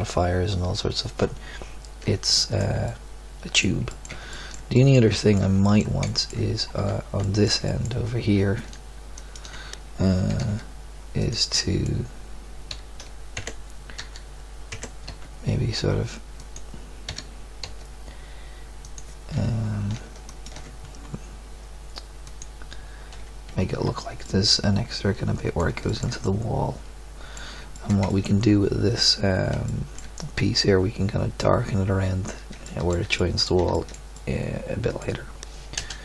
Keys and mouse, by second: 2.4-2.9 middle drag, 3.3 middle click, 4.0 middle click, 4.9-5.3 middle drag, 6.8 Tab, 10.3 g, 11.5-13.4 drag, 12.7 r, 14.0 e, 15.0 s, 17.1 e, 22.3 middle click, 23.8 Tab, 26.2 middle click, 26.4 middle click, 29.8-31.5 middle drag, 32.8-33.9 middle drag, 34.1-34.9 middle drag, 35.7 KP_0.